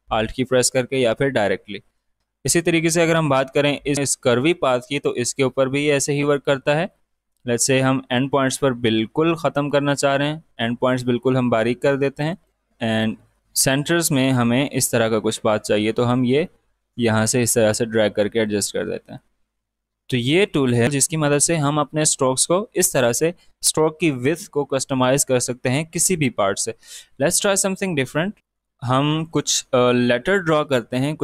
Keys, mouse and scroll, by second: 1.8 space, 1.9 click, 2.2 space, 5.1-8.8 drag, 8.8-12.1 drag, 12.1-14.6 drag, 14.6-20.1 drag, 27.2 space, 27.3 click, 28.3 alt+scroll up 1, 28.4 space, 29.1 click.